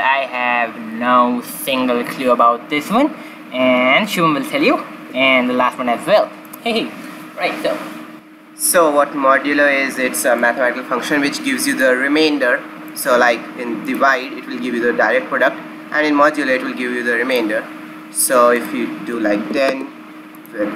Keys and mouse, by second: 10.4-12.1 drag, 12.8-15.8 drag, 18.5-20.3 drag.